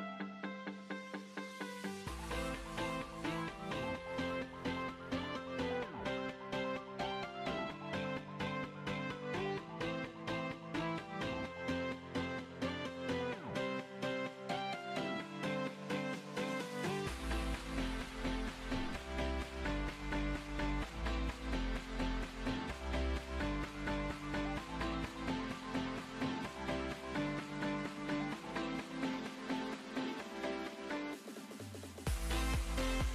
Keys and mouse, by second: 0.0 z, 1.6 KP_1, 1.6 z, 2.9 ctrl+r, 4.3 b, 4.7 e, 5.5-6.9 drag, 10.3 Tab, 13.2 z, 15.9 KP_7, 17.5 KP_1, 19.1 KP_1, 19.5 z, 19.9 ctrl+r, 22.9 e, 23.7 ctrl+r, 24.6 b, 25.2 ctrl+r, 25.4 b, 26.3 ctrl+r, 27.0 b, 28.7 ctrl+r, 28.9 b, 30.0-33.0 typing, 32.6 middle click.